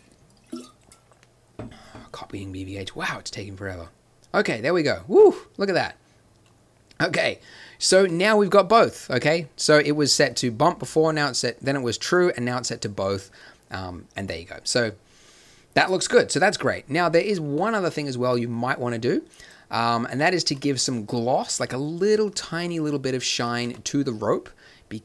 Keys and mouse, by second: 22.9 click.